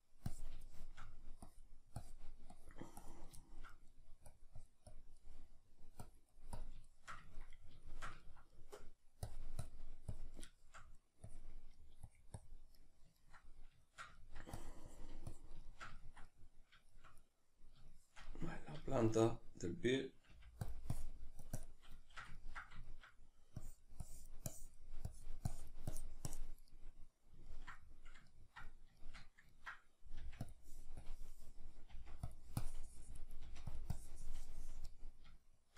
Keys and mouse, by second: 0.3 click, 0.7 shift+middle click, 1.5-3.4 drag, 3.4 shift+middle click, 4.3 click, 5.2 middle click, 6.0 click, 6.9-9.3 shift+middle drag, 9.3-10.6 drag, 10.6 shift+middle click, 11.3 click, 11.8 middle click, 12.1 click, 12.8-14.6 middle drag, 14.6-15.7 drag, 15.7-20.7 shift+middle drag, 20.3 f, 20.7-22.0 drag, 22.0-23.6 shift+middle drag, 23.6-26.7 drag, 26.7-30.5 middle drag, 30.2 f, 30.5 click, 31.9 click, 31.9 f, 33.4 click, 33.4 f, 35.4 shift+middle click.